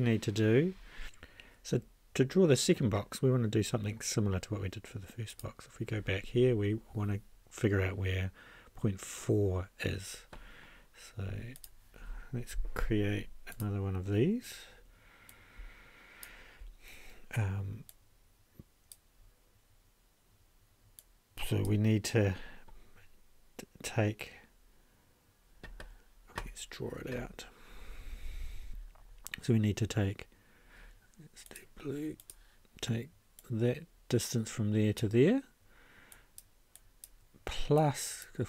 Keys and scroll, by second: 28.5 ctrl+a.